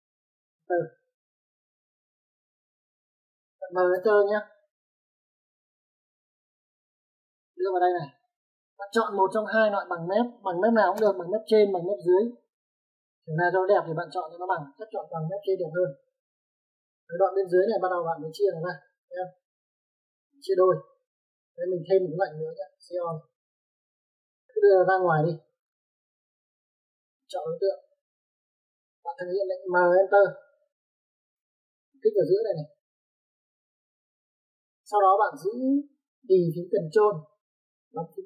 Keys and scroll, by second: 3.3 Return, 11.2 m, 11.4 space, 23.5-24.1 typing, 26.4 space, 30.8 m, 31.9 space.